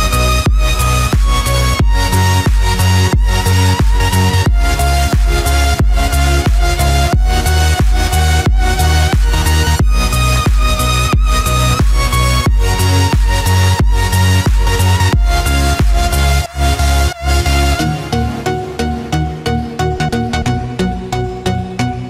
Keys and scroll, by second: 1.7 ctrl+z, 16.8 ctrl+z.